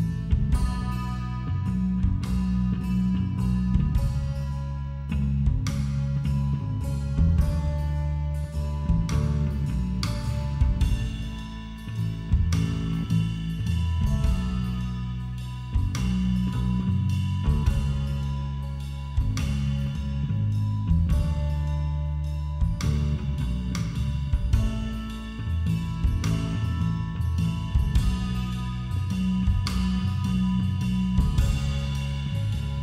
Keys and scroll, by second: 8.8 space, 21.9 b.